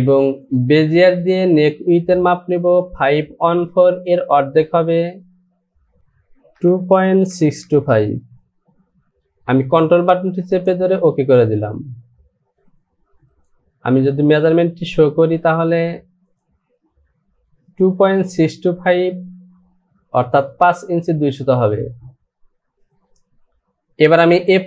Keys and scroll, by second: 7.3 KP_Decimal, 7.6 KP_6.